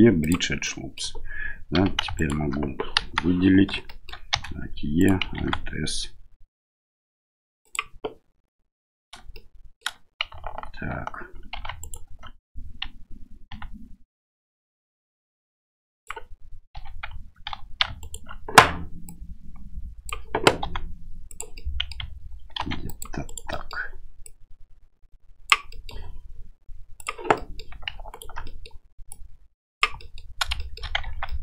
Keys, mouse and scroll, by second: 0.7 middle click, 1.7 3, 2.1 alt+right click, 2.9 KP_1, 3.8 shift+middle click, 4.3 e, 5.3 alt+s, 9.3 shift+click, 9.4 shift+middle click, 11.5 2, 11.8 right click, 13.5 s, 16.7 2, 17.6 3, 18.0 alt+right click, 19.0-20.1 drag, 20.6 s, 21.6 middle click, 22.5 ctrl+r, 23.6 middle click, 24.4-25.4 drag, 25.7 middle click, 27.3 middle click, 28.1 alt+right click, 28.4 middle click, 29.0 click, 29.9 middle click, 30.6 shift+middle click, 31.0 Tab, 31.2 middle click.